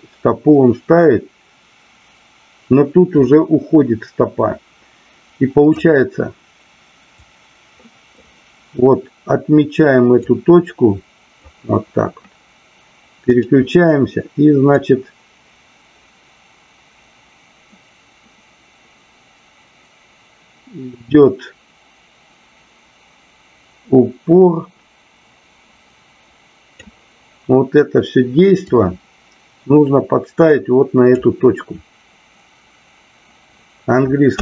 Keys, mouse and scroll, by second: 7.0-8.2 drag, 10.2-11.4 drag, 14.6-26.9 drag, 28.5-31.3 drag.